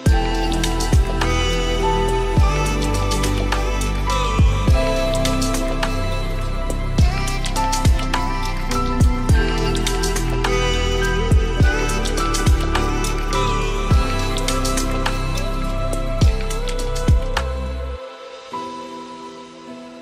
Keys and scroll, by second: 6.7 ctrl+z.